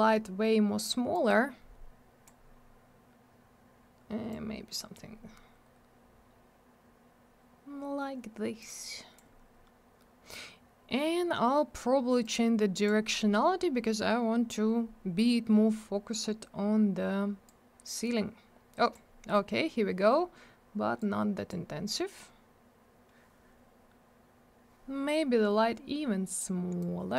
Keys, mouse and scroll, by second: 1.1 click, 4.3 click, 8.6 click, 12.2 click, 17.5 click, 21.0 click, 26.8 click.